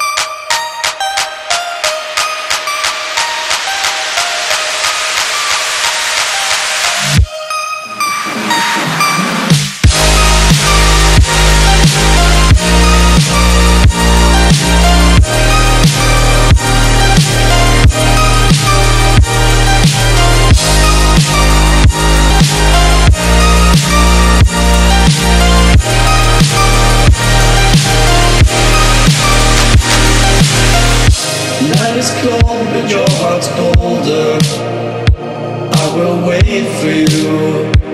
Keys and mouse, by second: 0.0-13.0 typing, 13.4 ctrl+a, 15.3 click, 15.5 Down, 17.4 click, 17.7-19.0 typing, 17.8 click, 18.2 click, 18.5 click, 18.9 click, 19.4-22.2 drag, 23.0 click, 25.2 Return, 27.2 click, 27.5 Return, 29.1-35.9 drag, 35.9 Left, 37.3 Down.